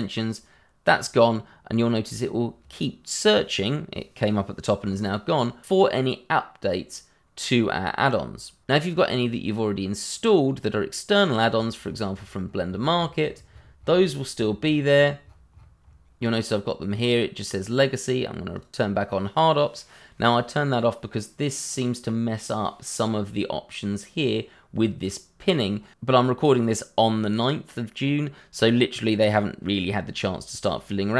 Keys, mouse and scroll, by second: 0.4 click, 11.5 scroll down 1, 18.5 click.